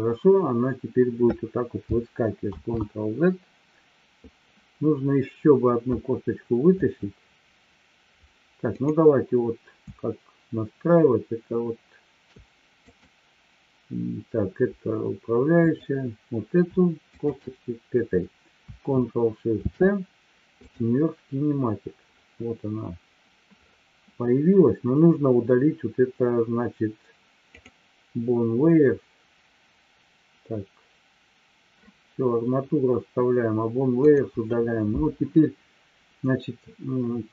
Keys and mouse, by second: 2.9 ctrl+z, 8.7 click, 12.8 click, 15.6 click, 17.0 shift+click, 19.6 ctrl+shift+c, 34.0 click.